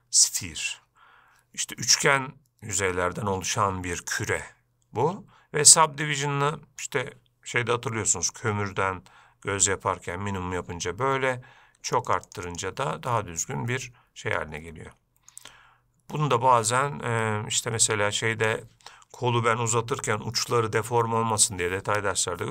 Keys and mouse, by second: 6.3 click, 12.2 click, 12.3 click, 12.5 click, 12.7 click, 13.4-15.6 middle drag, 18.2 click.